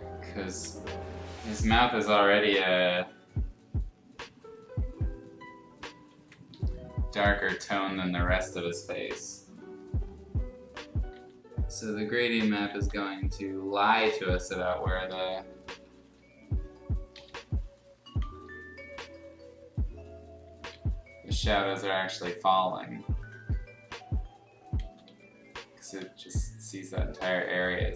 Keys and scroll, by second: 0.4 ctrl+z, 6.5 Escape, 7.3 space, 11.1 x, 12.3 ctrl+z, 12.5 ctrl+z, 12.9 x, 14.7 ctrl+z, 15.1 space, 15.5 r, 16.0 b, 17.1 b, 18.2 ctrl+shift+z, 20.4 ctrl+z, 20.7 x, 21.5 x, 24.8 ctrl+z, 25.0 x, 26.0 x.